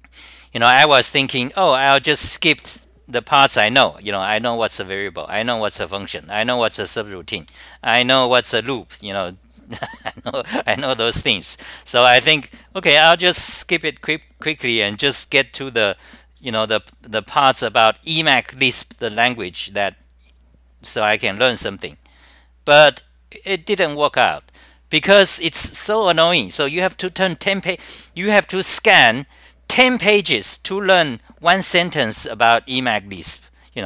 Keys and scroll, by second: 1.1 scroll down 9, 2.7 scroll down 9, 5.9 scroll down 9, 9.1 scroll down 9, 12.0 scroll down 9, 15.2 scroll down 9, 18.4 scroll down 9, 18.4 typing, 21.6 scroll down 9, 24.7 scroll down 9, 24.7 typing, 27.5 scroll down 9, 29.0 scroll down 9, 30.6 scroll down 9, 31.9 scroll down 9, 33.5 scroll down 9.